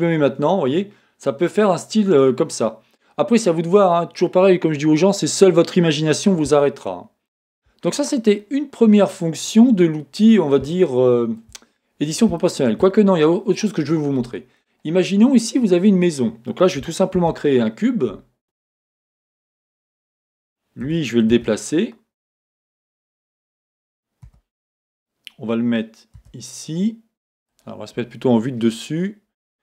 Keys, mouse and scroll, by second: 0.1 Tab, 10.1-10.8 scroll down 1, 17.1 shift+a, 20.9 g, 22.9 click, 24.2 g, 27.6 click, 28.6 KP_7.